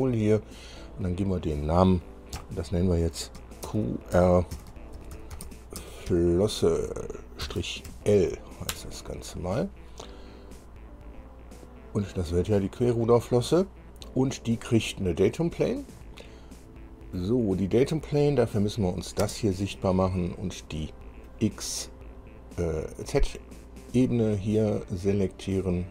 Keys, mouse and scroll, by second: 0.7 scroll down 2, 1.6 click, 2.5 F2, 3.8-6.2 typing, 7.6 -, 8.0 shift+l, 8.9 Return, 18.3 click, 19.4 space, 20.3-21.6 middle drag, 24.4 click.